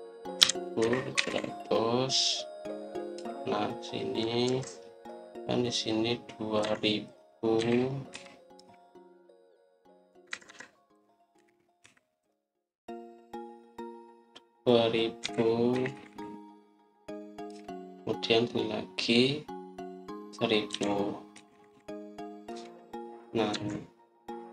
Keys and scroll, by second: 1.0-2.6 typing, 4.0 Return, 5.4 Escape, 7.5 Escape, 8.5-9.0 typing, 9.5 Return, 11.2 Escape, 11.4 Escape, 12.3-12.7 typing, 15.9-16.6 typing, 18.4 Return, 21.4-22.2 typing, 23.4 Return, 24.4 Escape.